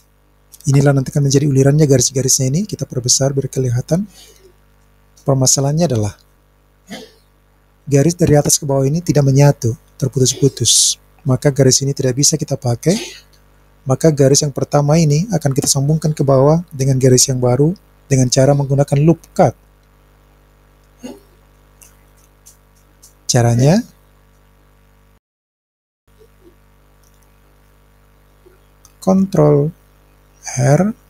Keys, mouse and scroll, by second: 2.6-4.3 scroll up 4, 4.3-6.1 drag, 24.2 scroll down 1, 24.4-25.6 scroll up 3, 25.6-26.0 scroll down 1, 26.1-27.1 scroll up 1, 30.7 ctrl+r.